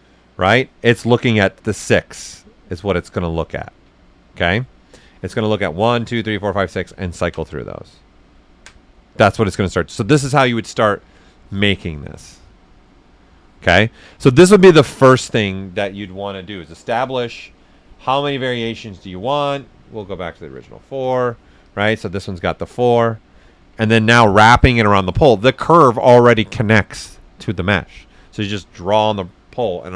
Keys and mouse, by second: 1.1 right click, 3.4 ctrl+z, 4.1 alt+right click, 4.5 right click, 8.3 alt+right click, 16.3-19.2 drag, 20.5 4, 21.0 Return, 21.6 click, 22.5 alt+right click, 23.6 ctrl+z.